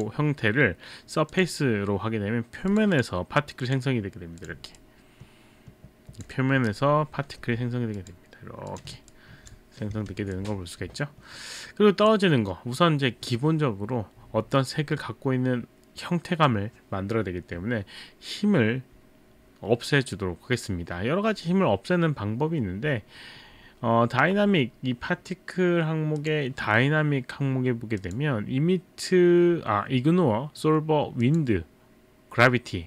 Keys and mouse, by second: 0.0 click, 1.3 click, 2.7 click, 2.9 click, 3.6 click, 4.5 click, 6.7-8.2 typing, 8.0 click, 8.7 click, 26.2 click, 28.0 click, 31.3 click.